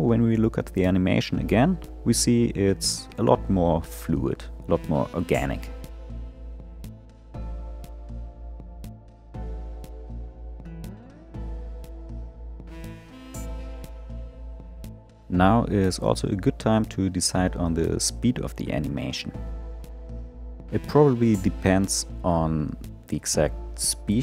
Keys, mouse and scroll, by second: 1.7-2.8 scroll down 3, 2.8-3.5 drag, 3.5 space, 7.1 click, 13.7 space.